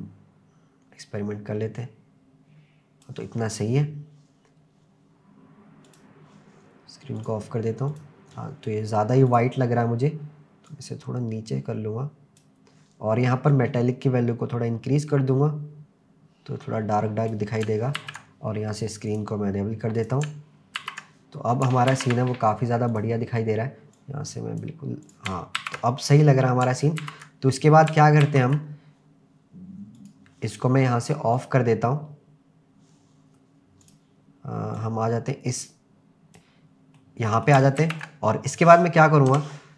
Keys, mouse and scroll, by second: 5.8 click, 7.2 click, 7.9 click, 9.3 click, 13.5-17.3 drag, 18.0 ctrl+s, 19.1 click, 20.0 click, 20.8 ctrl+s, 21.2 scroll down 1, 22.0 ctrl+s, 22.9 drag, 25.0 click, 25.6 ctrl+s, 26.1 scroll up 3, 27.0 ctrl+s, 27.2 scroll down 2, 28.3 ctrl+s, 30.0 click, 31.4 click, 33.8 click, 34.8-36.4 drag, 37.0-37.5 middle drag, 38.0 ctrl+s, 39.3 KP_0.